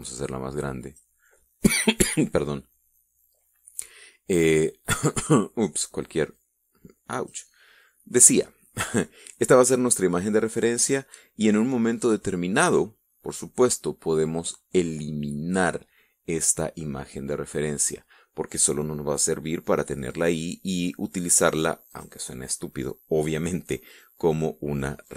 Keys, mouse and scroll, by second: 0.3-1.8 drag, 7.0-8.2 drag, 22.6 click.